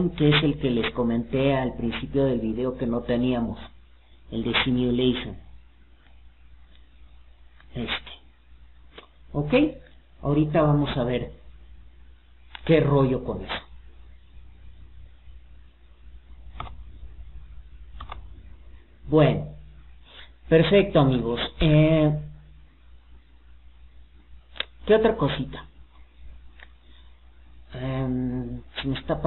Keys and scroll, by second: 12.1 Escape.